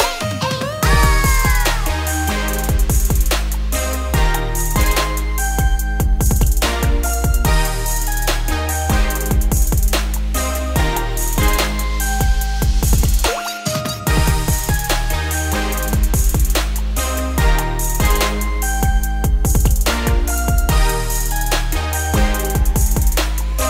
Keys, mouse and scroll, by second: 0.3 s, 3.4-4.2 scroll up 3, 4.2 shift+middle click, 4.7 g, 7.7 s, 9.0 s, 10.8-11.5 scroll down 1, 11.5 g, 12.6-13.8 scroll down 5, 13.8 click, 14.4 2, 14.6 click, 14.9 g, 19.1 click, 19.8 click, 20.5 g, 23.3 a.